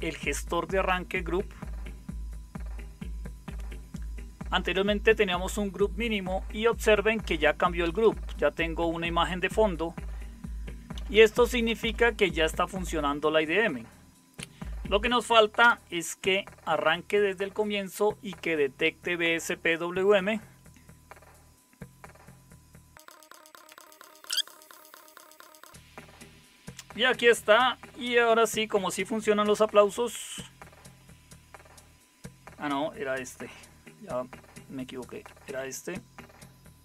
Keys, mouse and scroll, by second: 6.9 Down, 7.3 Down, 7.8 Up, 8.0 Up, 10.9 Down, 11.1 Down, 11.6 Up, 11.8 Up, 15.6 Return, 29.9 super+KP_9, 35.2 alt+super+KP_9.